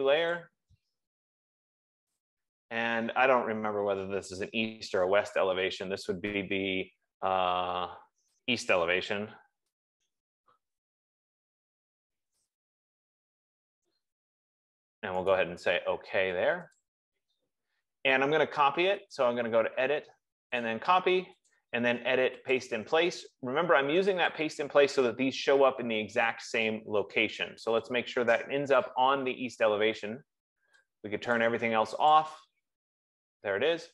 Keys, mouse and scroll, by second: 0.8 click, 2.6 click, 9.1 e, 10.2-14.3 typing, 15.6 right click, 17.3 click, 19.7 click, 21.9 click, 23.0 click, 29.3 click, 31.8 click, 32.6 click, 33.3 F15.